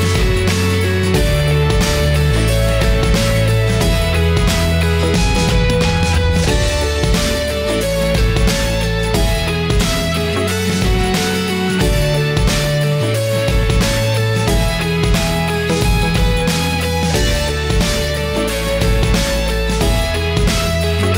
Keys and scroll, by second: 0.7 ctrl+j.